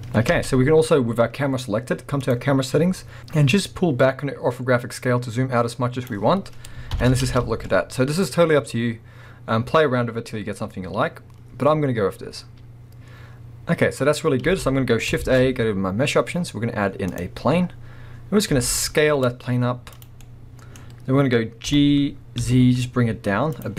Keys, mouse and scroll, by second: 0.3 space, 0.5-1.3 scroll down 2, 2.2 click, 3.5-20.1 drag, 7.0 shift+Left, 7.2 space, 7.5 scroll up 1, 14.5 space, 15.2 shift+a, 17.5-18.5 scroll down 2, 18.5 s, 20.1-23.6 middle drag, 20.8-21.6 scroll down 2, 21.6 g, 23.6 click.